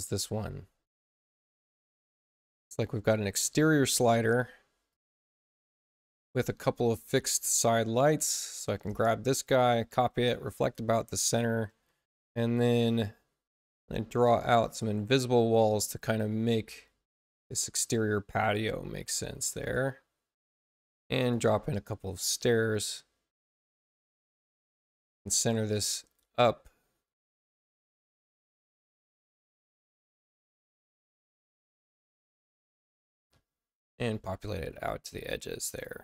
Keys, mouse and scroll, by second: 0.1 c, 0.4 click, 4.8 click, 6.8 click, 8.0 click, 8.4 space, 8.8 click, 9.6 ctrl+alt+c, 10.5 click, 13.7-14.7 drag, 16.6 click, 18.4 click, 21.1 click, 22.6-24.2 drag, 24.6 click, 25.9 click, 27.3 space, 27.8 click, 30.3-31.1 typing, 31.2 click, 32.6-33.9 drag, 35.1 click.